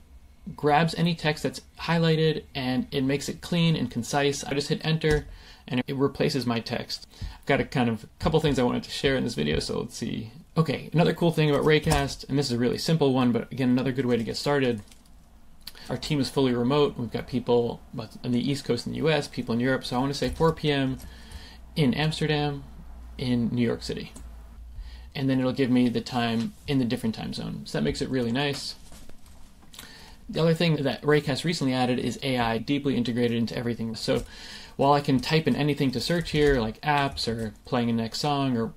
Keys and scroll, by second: 5.0 Return, 11.8 super+space, 15.9 4, 20.3 space, 24.6 t, 30.2 BackSpace, 37.2 super+a.